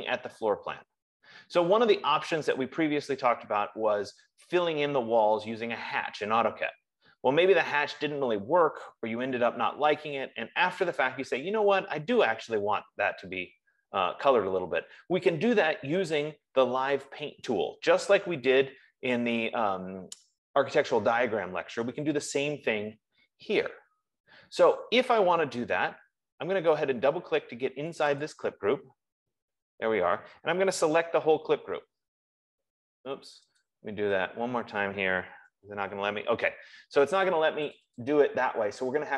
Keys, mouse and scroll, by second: 0.0 scroll, 0.8-1.8 scroll, 5.1 F15, 28.3 click, 29.0 click, 31.3 ctrl+a, 33.6 click, 34.2 click, 36.0 ctrl+a, 38.1 click, 38.6 click.